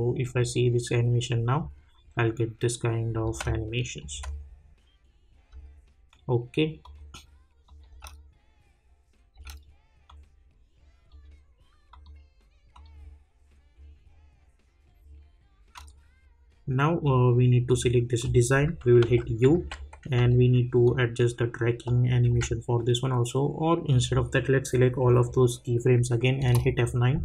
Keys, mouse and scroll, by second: 3.2 space, 3.8 click, 4.1 space, 6.8 click, 7.9 space, 10.0-11.9 drag, 19.0 u, 19.5 j, 20.1 k, 20.8-22.2 drag, 22.2 j, 23.9-26.4 drag, 26.4 F9.